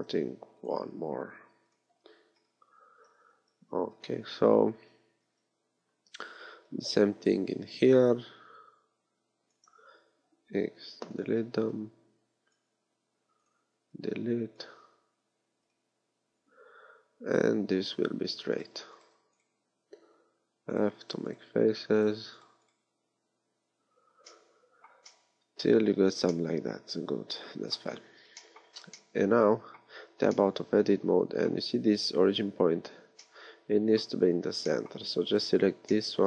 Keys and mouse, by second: 5.2 a, 7.8 b, 10.5 x, 11.5 b, 12.9 x, 13.7 b, 15.0 x, 20.3 f, 21.7 f, 23.0 f, 28.7 a, 29.9 Tab.